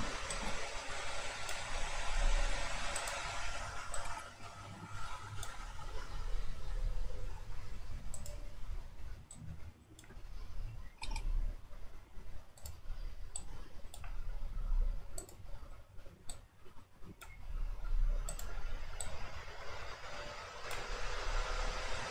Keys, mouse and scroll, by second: 0.3-2.1 drag, 2.1 r, 4.0-6.6 drag, 9.3-10.9 drag, 10.9 r, 13.4-14.5 drag, 14.5 r, 16.3-17.6 drag, 17.6 r, 19.0-21.2 drag, 21.2 r.